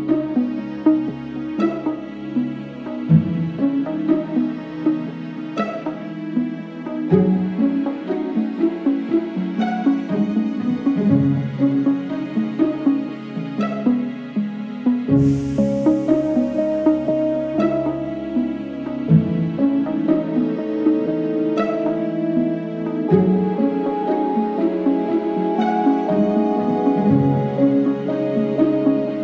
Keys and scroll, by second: 1.8 ctrl+e, 4.0 ctrl+e, 4.5 ctrl+e, 6.4 ctrl+r, 6.8 Escape, 9.6 ctrl+r, 10.0 Escape, 16.7 alt+z, 21.1 alt+z, 23.2 ctrl+e.